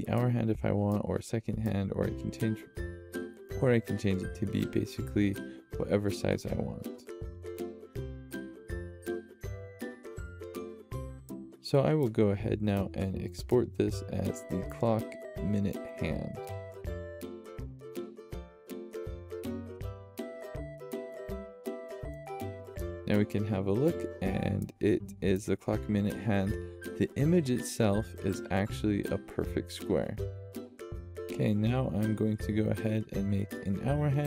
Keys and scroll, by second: 15.8-18.6 typing, 23.7 typing, 32.4-33.9 typing.